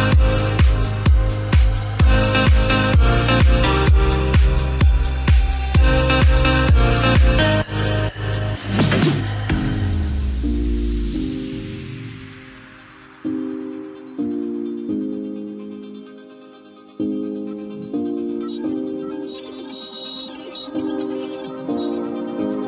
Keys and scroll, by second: 0.3 ctrl+0, 9.5 ctrl+i.